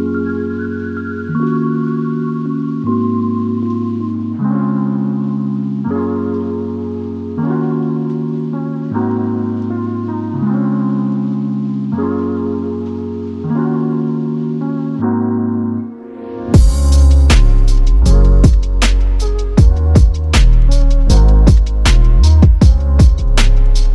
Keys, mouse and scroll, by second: 0.0-4.3 typing, 4.3 Return, 6.3 ctrl+v, 7.2 click, 8.4 m, 10.2 typing, 12.1 typing, 12.4 click, 13.1 typing, 14.9-16.3 typing, 16.7 click, 19.8 click.